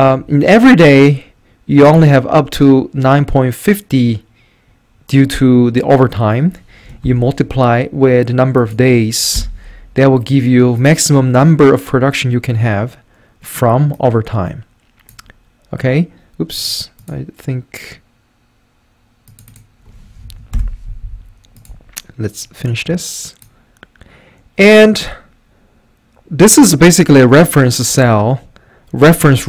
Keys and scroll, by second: 0.0-1.1 typing, 4.2 typing, 7.0 *, 9.4 Return, 20.2 F4, 20.5 Return.